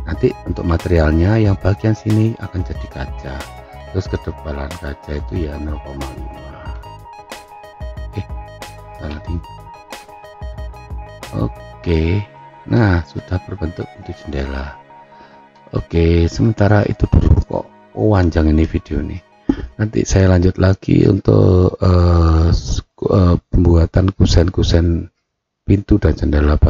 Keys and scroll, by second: 6.7 0, 7.3 1, 9.0 BackSpace, 9.7 5, 9.9 Return.